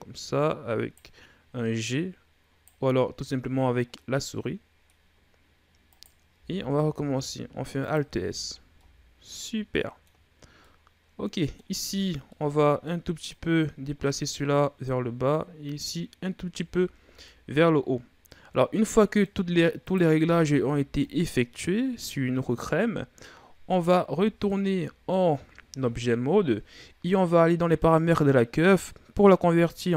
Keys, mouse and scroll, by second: 1.6 right click, 3.8-4.9 middle drag, 4.9-5.7 scroll up 1, 5.7 right click, 6.3 alt+s, 8.1 Tab, 8.4 scroll down 2, 8.6-10.1 middle drag, 10.1-10.4 scroll up 3, 10.4-11.6 middle drag, 11.6 Tab, 12.1 middle click, 13.1 right click, 14.7 right click, 16.4 Tab, 16.8 scroll down 1, 17.1-19.6 middle drag, 19.6 right click, 20.0 Tab, 20.5 middle click, 21.4 right click, 23.8 Tab, 24.3-27.3 middle drag.